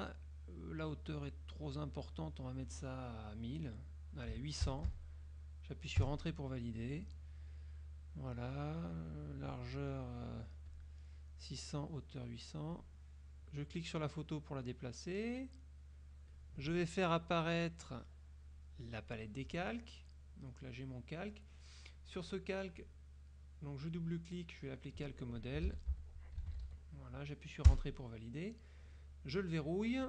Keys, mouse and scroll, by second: 1.6-2.3 drag, 4.5 KP_8, 4.8 KP_0, 6.1 KP_Enter, 9.0 right click, 10.8 click, 12.9-16.6 drag, 17.9-19.4 drag, 19.7 scroll up 1, 20.7 click, 21.6 click, 22.3 click, 22.9 click, 24.0 click, 24.7 click, 25.5-27.0 typing, 27.7 Return.